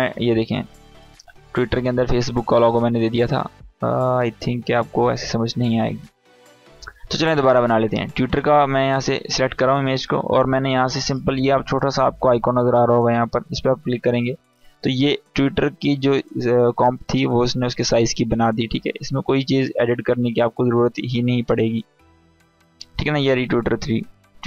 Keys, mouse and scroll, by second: 4.1-13.6 drag, 15.1 scroll down 1, 22.0-24.4 drag.